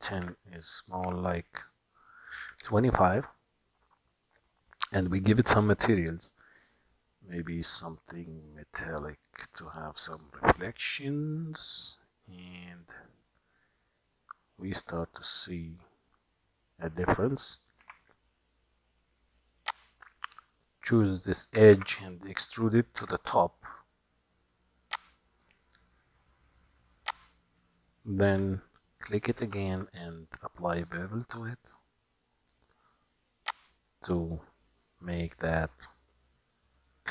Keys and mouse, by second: 1.1 s, 5.0 click, 7.2-9.0 drag, 10.6-15.1 drag, 15.8-17.0 middle drag, 18.0 Tab, 21.8 e, 27.1 click, 29.4 ctrl+b.